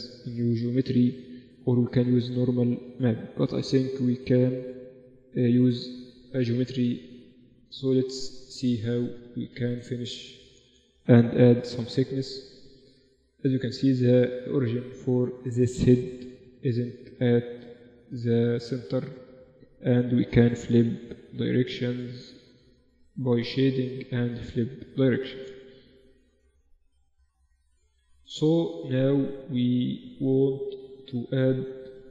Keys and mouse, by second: 7.3 Tab, 8.1 middle click, 8.2 z, 8.9-9.9 middle drag, 9.9 Tab, 10.5 a, 10.9 a, 11.5 ctrl+n, 11.8 Tab, 12.3 Tab, 13.1 Tab, 19.5 Tab, 20.1 Tab, 21.0 Tab, 22.7-25.3 drag, 23.5 t, 24.3 Tab, 26.9 z, 28.3 z, 28.9 z.